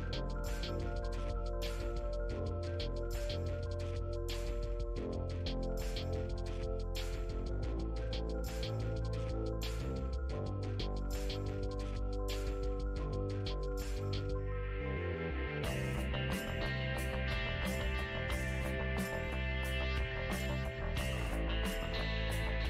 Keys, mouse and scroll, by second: 1.2 middle click, 1.6 click, 2.6 middle click, 3.0 click, 3.7 middle click, 4.0 click, 4.9 middle click, 5.8 click, 6.3-8.5 middle drag, 8.5 space, 8.8-10.7 drag, 10.7 f, 11.3 middle click, 11.7-13.0 drag, 13.0 middle click, 13.3-15.5 drag, 15.5 middle click, 15.8-18.8 drag, 18.8 space, 19.2 f, 19.9 click, 20.8 f, 21.4 click, 22.3 middle click.